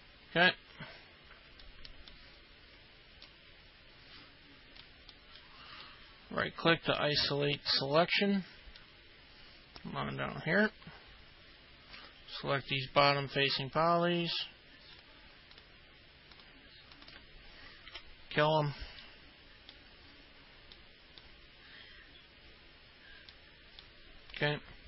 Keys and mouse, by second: 0.0 alt+middle click, 3.4-4.9 alt+middle drag, 5.2 middle click, 5.8-8.3 right drag, 8.9-10.7 alt+middle drag, 13.0 ctrl+click, 13.6 ctrl+click, 15.0 ctrl+click, 15.6 ctrl+click, 16.4 ctrl+click, 19.1 alt+middle click, 23.4 alt+middle click.